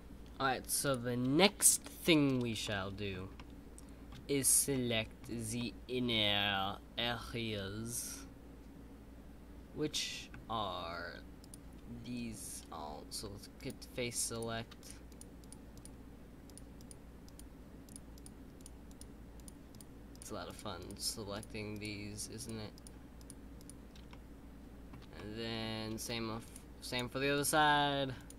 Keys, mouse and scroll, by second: 2.6-4.2 middle drag, 4.2-4.7 scroll up 2, 4.7 middle click, 5.2-5.5 scroll down 2, 5.5-8.7 middle drag, 14.7 shift+click, 24.0-26.4 middle drag, 26.4 shift+click.